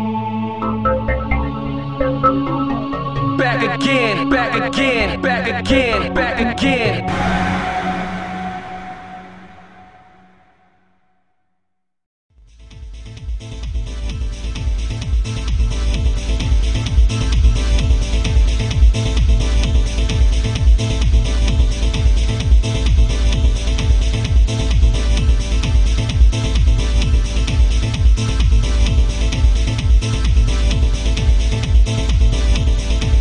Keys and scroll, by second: 2.3 ctrl+z, 7.2 ctrl+z, 12.2 ctrl+z, 13.7 ctrl+z, 20.1 alt+space, 25.7 alt+space, 26.5 ctrl+z, 30.8 ctrl+z.